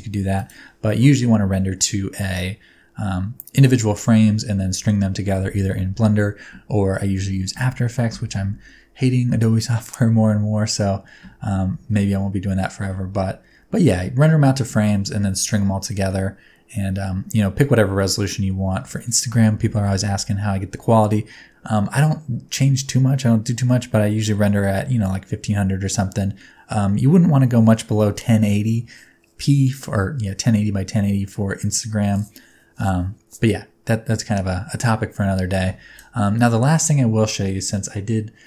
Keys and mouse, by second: 0.5-3.5 drag, 11.8 space, 18.8 space.